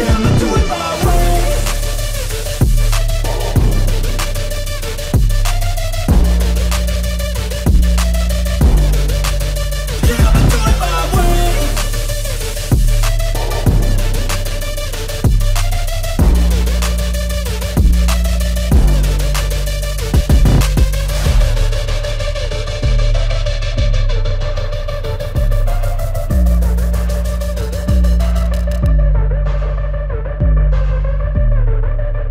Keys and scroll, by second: 3.7-4.8 typing, 7.2 ctrl+t, 11.4 Return.